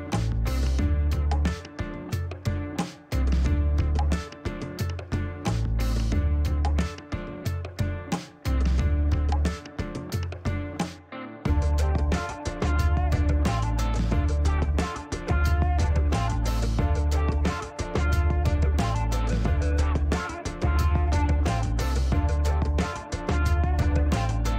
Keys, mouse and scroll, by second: 0.0 shift+right click, 1.0 shift+scroll up 2, 2.0 shift+right click, 5.7 shift+middle click, 6.8 shift+right click, 8.0 shift+right click, 8.6 shift+scroll down 1, 8.9 middle click, 9.4 shift+right click, 10.3 shift+scroll up 1, 11.0 shift+right click, 11.8 shift+middle click, 12.2 shift+right click, 21.3 shift+right click, 22.4 shift+middle click, 23.2 shift+right click.